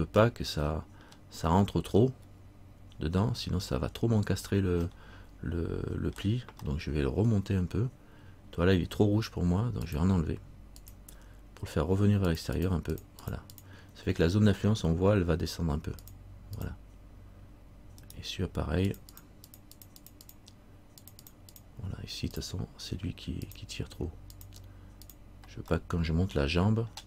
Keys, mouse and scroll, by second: 0.5 middle click, 2.1-2.4 scroll up 2, 3.7 scroll up 1, 5.1 middle click, 6.8 middle click, 7.6 z, 10.0 click, 12.5-13.4 click, 18.2 right click, 19.1 click, 19.9 click, 20.2-25.8 click, 25.9 middle click, 26.0 click.